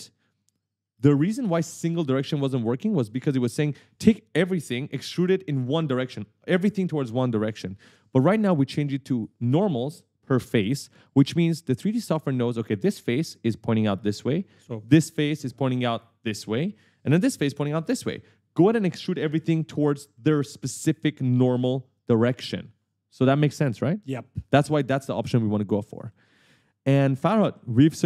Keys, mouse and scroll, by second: 3.2 right click, 8.3 right click, 9.6 a, 11.2-12.7 typing, 11.4 right click, 26.1 right click, 26.2 s, 26.5 scroll up 1, 27.0 q, 27.6 w.